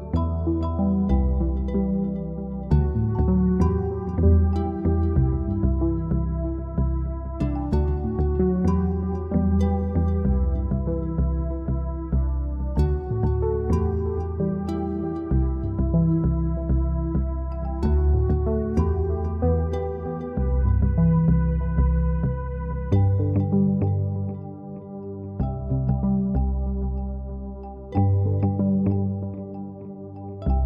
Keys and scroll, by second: 26.8-29.3 typing.